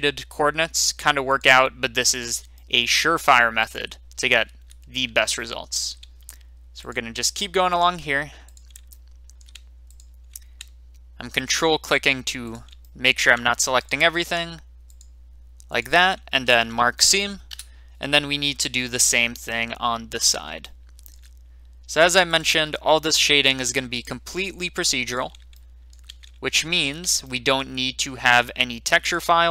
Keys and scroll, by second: 17.4 Return.